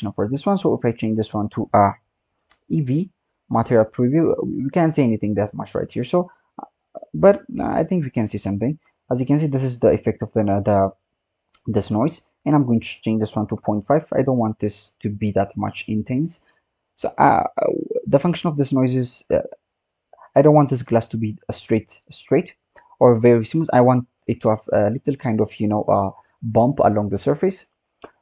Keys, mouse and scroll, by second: 5.7-7.3 scroll up 14, 7.3 scroll down 5, 7.6-9.6 scroll up 7, 10.3-10.6 scroll down 7, 11.8-12.4 scroll up 7, 12.4-14.4 drag, 14.4-15.2 scroll down 5, 15.2-15.6 scroll down 1, 15.6-16.5 scroll up 4, 16.5 scroll up 2, 16.8-18.2 scroll down 7, 18.2 click, 20.5 click, 21.9-22.7 scroll up 6, 22.7-23.5 scroll down 4, 23.5 click, 27.3 click.